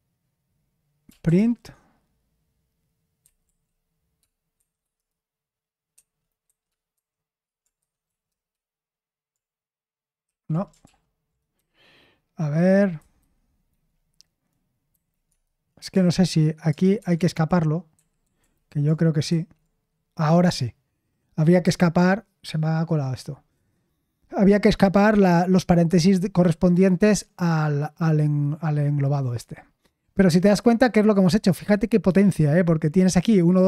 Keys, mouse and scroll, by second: 0.8-1.8 typing, 2.9-4.5 typing, 5.9-8.0 typing, 8.3 Return, 10.8 ctrl+p, 10.8 typing, 11.5 Left, 12.2 Left, 12.2-12.9 Left, 13.2 Left, 14.9 Left, 15.3 space, 15.9 Left, 16.9 \, 17.9 Right, 18.2 Right, 18.4 Right, 19.3 \, 30.4 Escape.